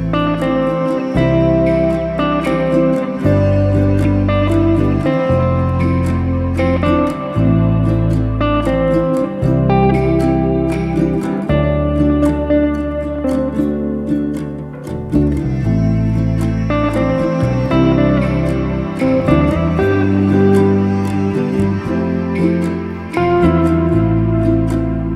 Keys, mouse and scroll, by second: 0.5 a, 7.8 Tab, 10.1 alt+d, 12.3-13.5 scroll down 1, 13.5-15.4 typing, 18.8-20.3 ctrl+z, 20.6 ctrl+z, 22.0 alt+d, 24.3-25.1 scroll up 2, 25.1 shift+r.